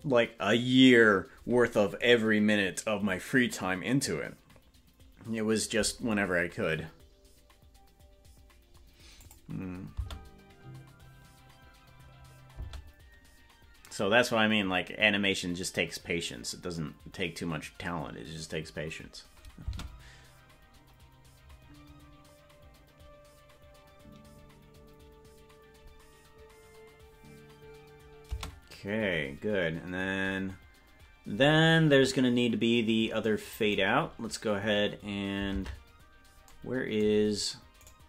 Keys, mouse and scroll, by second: 9.3 click, 9.9 space, 12.7 space, 32.2 scroll down 3, 32.2 space, 32.4 scroll up 3, 32.4-33.2 scroll down 1, 33.2 scroll down 3, 34.0 scroll down 1, 34.1 scroll up 1, 34.2 scroll down 1, 35.6 ctrl+Tab, 37.9 right click.